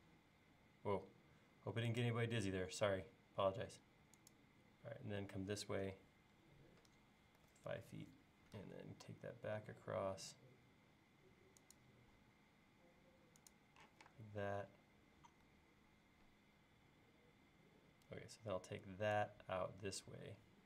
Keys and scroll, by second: 7.2-8.6 typing, 13.9 p.